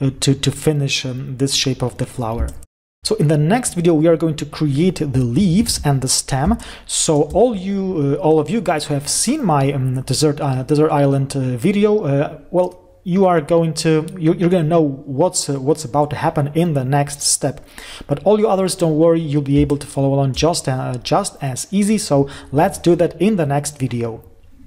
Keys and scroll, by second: 5.9 ctrl+-.